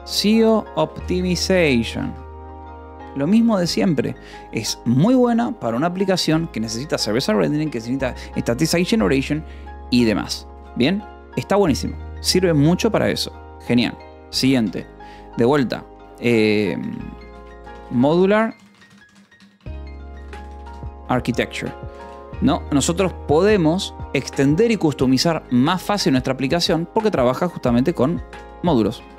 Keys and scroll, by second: 0.0-2.1 typing, 11.0 ctrl+s, 11.8 o, 12.4 :, 12.6 space, 16.4-20.0 typing, 20.9 Escape, 22.5 ctrl+s, 25.2 a, 25.6 space, 25.9 =, 26.0 space, 27.4-29.1 typing.